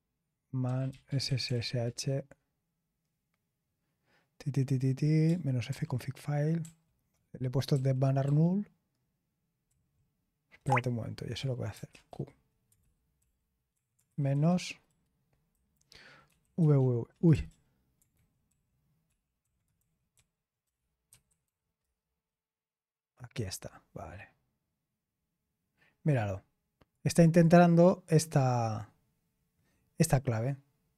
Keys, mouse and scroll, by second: 0.3-2.0 typing, 5.6 ctrl+d, 6.6 ctrl+d, 7.1 ctrl+d, 7.7 ctrl+d, 8.2 ctrl+d, 10.6 ctrl+c, 11.6-14.0 typing, 14.3 ctrl+a, 15.5 alt+f, 18.1 Delete, 18.1 BackSpace, 19.4 ctrl+p, 20.1 ctrl+a, 21.0 f, 26.1 click, 27.1 click, 29.2-30.6 scroll up 2, 30.6-30.9 scroll up 2.